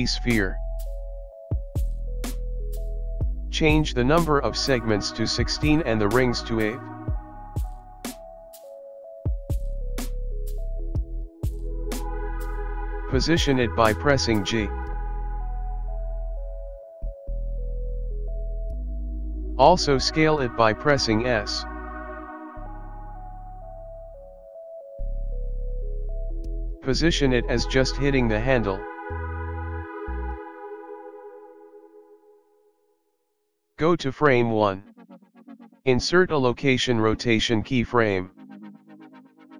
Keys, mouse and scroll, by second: 3.6 click, 4.8 click, 8.9 click, 11.9 g, 14.6 g, 16.4 g, 17.8-18.4 scroll up 5, 18.4 shift+middle click, 18.7 scroll up 2, 19.0 shift+middle click, 20.1 click, 21.2 s, 25.4 g, 29.6-30.6 scroll up 4, 29.8 KP_1, 30.2 shift+middle click, 30.6 scroll down 1, 30.8 scroll down 2, 30.8 g, 31.8-32.5 scroll down 11, 32.5 middle click, 32.7 shift+KP_1, 32.8 shift+middle click, 33.2 scroll down 1, 33.9 click, 37.0 i.